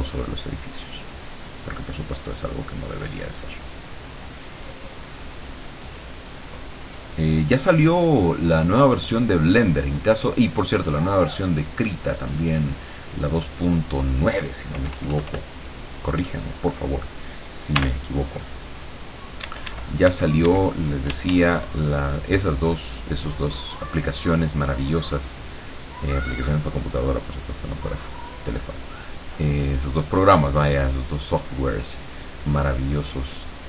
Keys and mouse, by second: 14.8 KP_Add, 15.8 middle click, 17.8 e, 19.5 e, 21.2 d, 21.8-32.4 drag, 32.4 middle click, 33.5-33.6 drag.